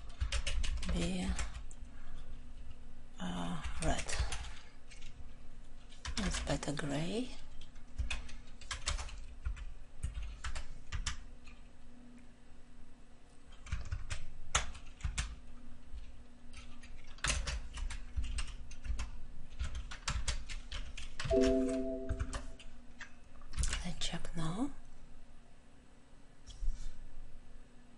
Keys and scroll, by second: 13.8 ctrl+z, 18.1 ctrl+;.